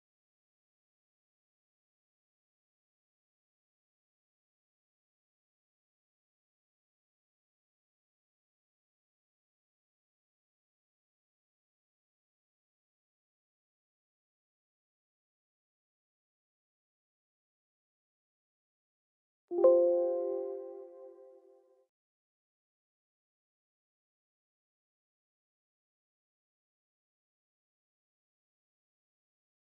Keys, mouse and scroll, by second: 0.9 click, 1.5 middle click, 1.6 middle click, 3.3 click, 4.1 click, 5.3 click, 6.2 middle click, 6.3 middle click, 6.3 middle click, 10.8 click, 11.6 middle click, 11.7 middle click, 11.8 middle click, 11.9 middle click, 12.4 middle click, 14.5 middle click, 14.5 middle click, 14.7 middle click, 14.9 middle click, 15.3 scroll, 15.3 middle click, 16.6 click, 17.5 middle click, 17.6 middle click, 18.5 click, 19.4 click, 20.3 scroll, 20.3-20.7 middle click, 22.8-23.2 scroll, 23.2 click, 25.3 click, 26.1 click, 28.1 click.